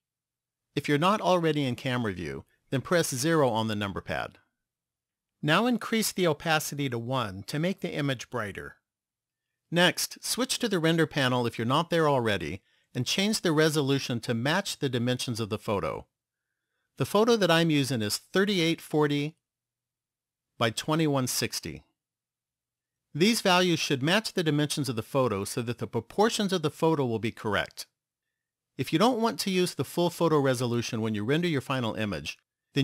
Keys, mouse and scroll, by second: 4.3-7.7 scroll down 6, 7.7 click, 16.5 click, 20.3 click.